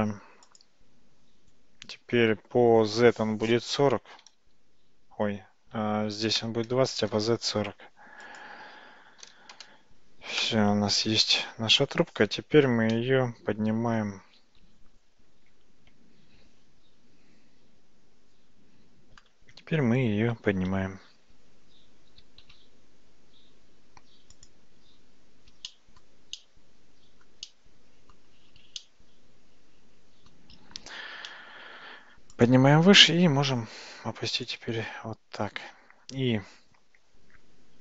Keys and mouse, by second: 0.7-7.9 drag, 8.4-11.0 drag, 22.5 g, 25.7-26.1 ctrl+right drag, 26.4-27.3 ctrl+right drag, 27.5 ctrl+middle click, 28.9-30.4 shift+middle drag, 31.2 g, 33.1 g.